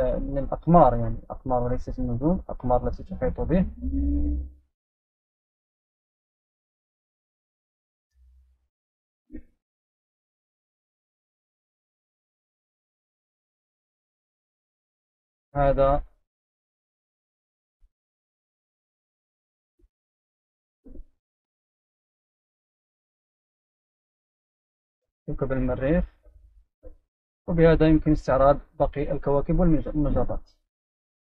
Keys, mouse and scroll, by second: 3.4 right click, 4.3 click, 8.6-9.8 right drag, 11.7 click, 12.3 click, 12.7 click, 13.7 right click, 17.5 right click, 20.1 click, 20.4 middle click, 20.6-22.7 right drag, 23.0 right click, 24.4 right click, 25.5 right click, 27.1-28.1 right drag, 28.2 click.